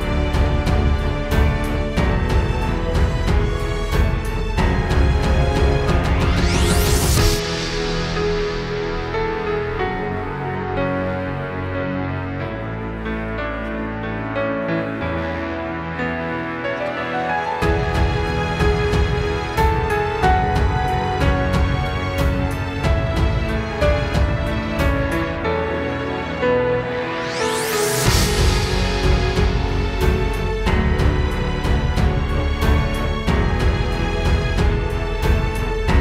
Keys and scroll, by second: 0.9 super+space, 8.4 super+space, 8.5 super+space, 11.1 super+z, 13.2 super+", 17.3 super+", 17.9 space, 19.6 space, 20.1 super+space, 21.7 space, 23.1 super+", 25.9 super+z, 28.0 space, 29.2 space, 30.1 super+Tab, 35.6 super+".